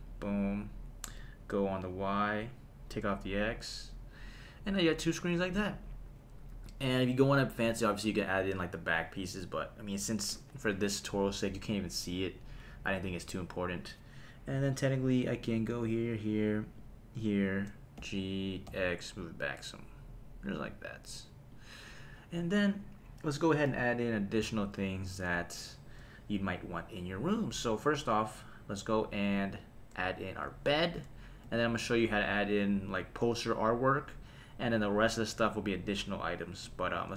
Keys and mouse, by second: 2.2 click, 4.9 click, 7.7 middle click, 14.8 click, 15.4 click, 16.0 shift+click, 16.8 shift+click, 18.0 g, 18.7 x, 20.4 click, 21.5 click, 27.4 click, 36.9 shift+a.